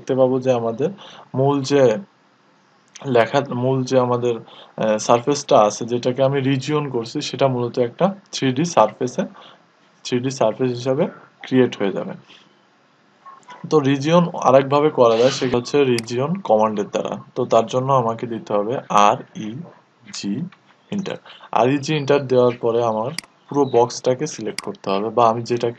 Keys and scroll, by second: 19.4-20.1 typing, 24.1-24.8 typing.